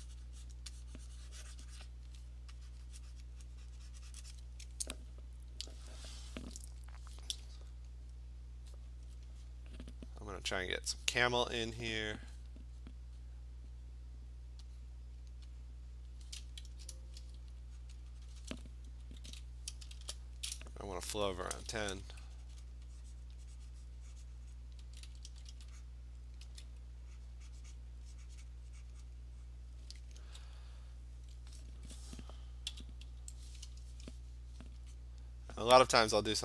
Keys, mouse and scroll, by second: 0.6 click, 1.6 click, 1.8 click, 1.9 click, 3.3 click, 4.4 click, 10.8 click, 11.7 click, 15.2 click, 16.1 click, 16.7 Return, 17.9 click, 18.5 click, 19.3 [, 20.0 shift+1, 21.4-22.0 typing, 22.0 click, 22.8 click, 23.3 click, 24.6 click, 24.8-26.5 typing, 25.9 click, 27.3 click, 27.8 click, 28.5 click, 28.9 click, 29.1 click, 29.5 click, 30.3 [, 31.0 click, 32.7 d, 35.0 click.